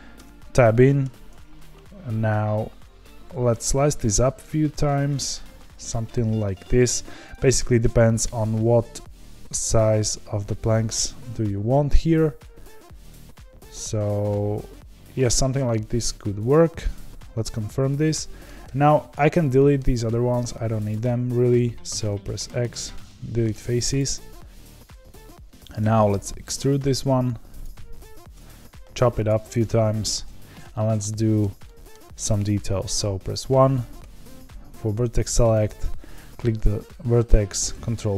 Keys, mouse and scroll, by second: 0.1 Tab, 1.0 ctrl+r, 8.1 ctrl+r, 18.0 middle click, 18.6 3, 19.4-20.9 middle drag, 20.9 click, 22.7 x, 23.0 middle click, 23.9 click, 25.8 e, 28.1 ctrl+r, 30.7-31.0 scroll up 2, 31.0-33.9 shift+middle drag, 33.9 1, 35.5 click, 37.6 ctrl+b.